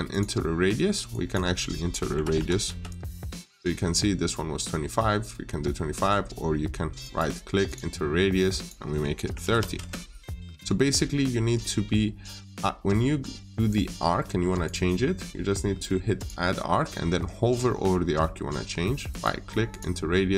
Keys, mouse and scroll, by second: 1.7-2.7 typing, 3.2-5.1 scroll up 1, 6.9 right click, 7.5 click, 8.9-9.8 typing, 11.1 middle click, 11.4-14.5 scroll down 1, 14.5 click, 17.5 middle click, 18.9 right click, 19.5 click.